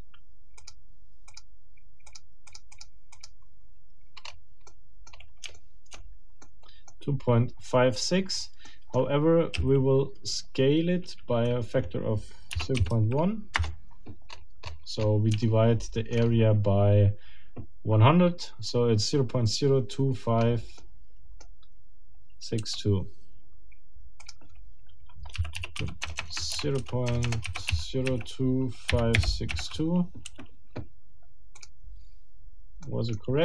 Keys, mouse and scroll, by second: 0.6 click, 1.3 click, 2.1 click, 2.5 click, 3.1 click, 4.2-4.5 scroll up 2, 4.7 middle click, 5.1 scroll up 2, 5.5 shift+middle click, 5.9-6.3 shift+scroll up 2, 6.4 shift+middle click, 7.9-8.6 scroll down 4, 8.7 middle click, 9.5 s, 12.5 0, 12.8 ., 12.9 1, 13.5 Return, 14.3-15.3 scroll up 3, 15.4 shift+middle click, 16.2-16.6 shift+scroll up 1, 20.4 scroll up 2, 20.8 click, 20.9 scroll down 2, 25.3-29.5 typing, 32.8 middle click.